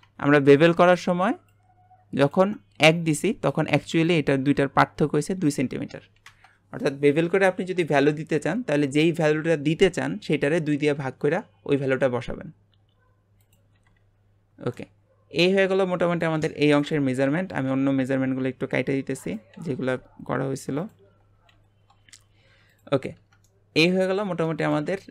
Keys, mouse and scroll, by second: 1.5-3.0 ctrl+drag, 3.0-4.0 scroll up 1, 7.9 Delete, 12.4-13.4 scroll down 1, 13.4 click, 13.7 Delete, 14.0 Delete, 14.3-14.7 scroll down 5, 14.7-16.8 middle drag, 16.8 click, 17.2 Delete, 17.7 Delete, 19.2 click, 19.5 Delete, 19.8 Delete, 20.8 click, 21.1 Delete, 21.5 Delete, 22.7 click, 23.1 Tab, 23.5-25.1 middle drag.